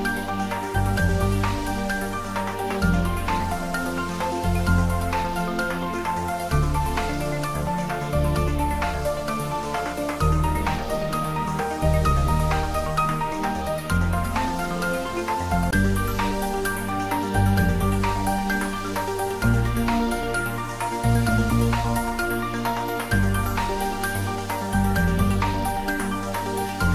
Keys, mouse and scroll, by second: 1.0 scroll down 1, 1.9 middle click, 3.5 right click, 4.3 click, 4.7 scroll up 1, 5.4 ctrl+z, 6.3-7.5 scroll up 1, 7.9 ctrl+3, 8.6 scroll down 1, 9.7-10.1 scroll down 1, 10.1 scroll up 1, 11.7 ctrl+r, 13.3 Tab, 14.2 ctrl+r, 14.6 click, 17.2 ctrl+r, 17.7 click, 22.3 scroll up 1, 24.1 ctrl+r, 24.5 click, 26.6 ctrl+r.